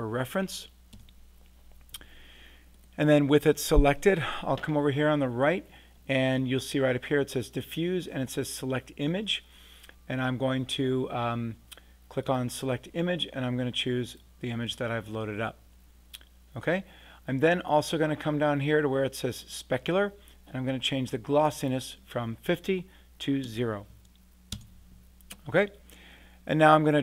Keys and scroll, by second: 0.9 Return, 2.9 Return, 23.4 0, 24.5 Return.